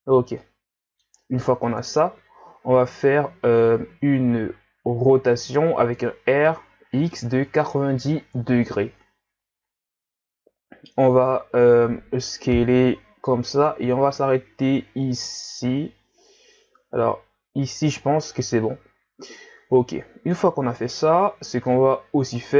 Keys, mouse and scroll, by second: 0.3 scroll up 1, 0.4-1.8 middle drag, 1.8 KP_1, 3.8-4.4 scroll up 1, 4.4-5.0 scroll up 1, 5.0-6.5 scroll up 1, 6.5 r, 10.5 s, 18.4-19.6 middle drag, 19.6 Tab.